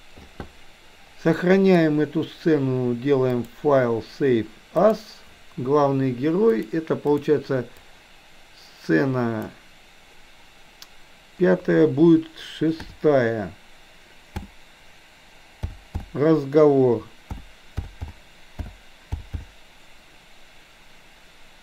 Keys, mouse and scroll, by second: 1.4-1.7 middle drag, 3.4-5.1 drag.